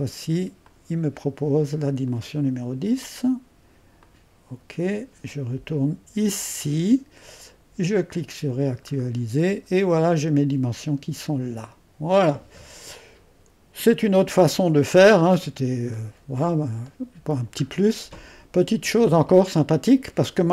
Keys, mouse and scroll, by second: 2.1-7.3 drag, 8.1 click, 9.0-11.1 scroll down 3, 11.5-12.6 scroll down 1, 12.6-13.7 scroll down 1, 14.4-18.0 middle drag.